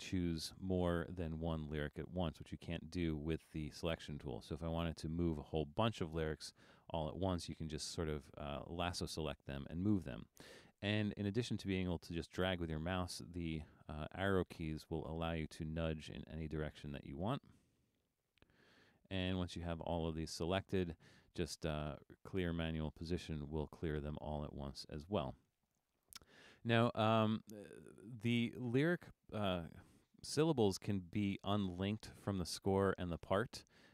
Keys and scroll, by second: 13.2 Down, 13.3 Down, 13.8 Down, 14.2 Down, 14.6 Down, 14.9 Right, 15.6 Left, 16.1 Down, 16.4 Down, 17.2 Up, 17.4 Up, 17.6 Down, 17.8 Down, 18.0 Down, 18.2 Down, 18.4 Down, 18.6 Down.